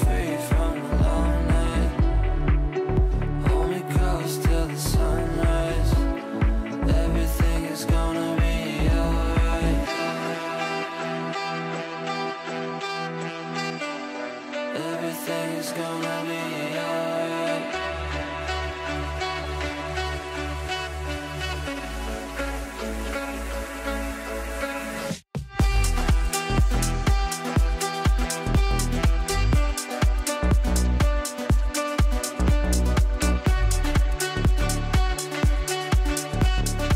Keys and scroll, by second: 10.4 shift+F2, 10.9 Escape, 20.2 space, 35.6 shift+Page_Down, 36.1 f.